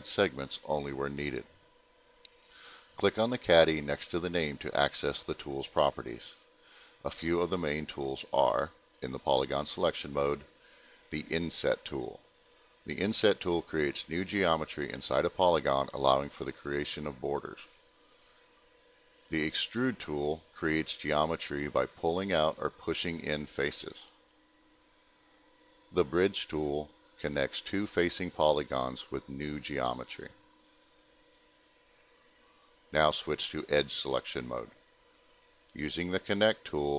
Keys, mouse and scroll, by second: 9.4 click, 10.6 alt+middle click, 11.9 click, 13.8-14.6 typing, 15.5 alt+middle click, 16.4 middle click, 17.9 click, 19.6 click, 20.3 alt+middle click, 21.5 click, 24.6 click, 24.9 alt+middle click, 26.4 click, 26.9 ctrl+click, 27.0 middle click, 27.7 ctrl+click, 29.7 click, 30.1 alt+middle click, 31.1 click, 33.1 click, 35.1 click, 35.9 click, 36.2 alt+middle click, 36.6 scroll up 1, 36.8 middle click.